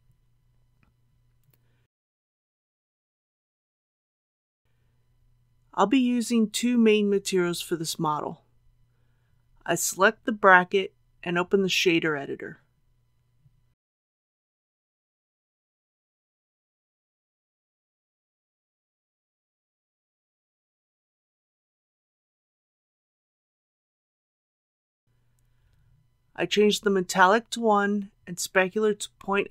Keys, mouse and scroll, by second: 8.0 Tab, 9.1 click, 16.0 n, 17.5-19.0 drag, 19.7-21.0 middle drag, 21.4 click, 23.0 shift+middle click, 24.2-24.7 scroll up 1, 26.5 click, 27.3 KP_1, 29.2 click.